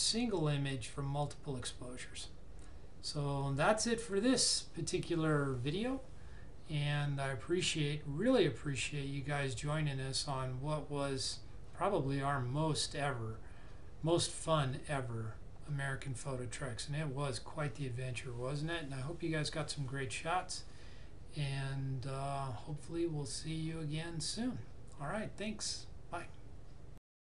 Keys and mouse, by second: 27.3 click.